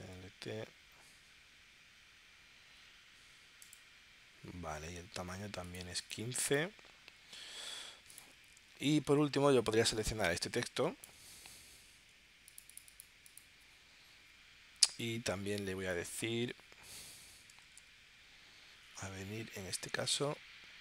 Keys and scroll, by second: 11.3 super+Tab, 17.1-18.1 typing.